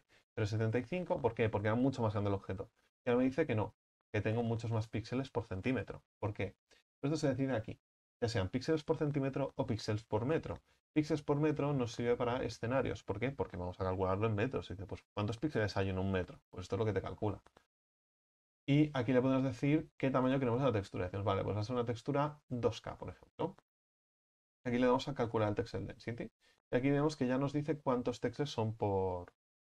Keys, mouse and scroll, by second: 3.3-29.8 drag.